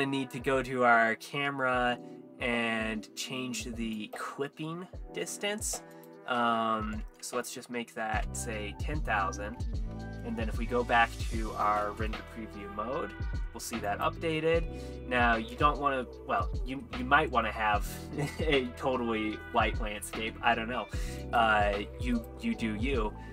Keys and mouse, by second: 4.0 click, 6.0-8.3 drag, 7.4 KP_0, 10.0 z, 13.9 click, 15.0 z, 16.3 ctrl+s, 21.2 click, 22.2-23.3 drag.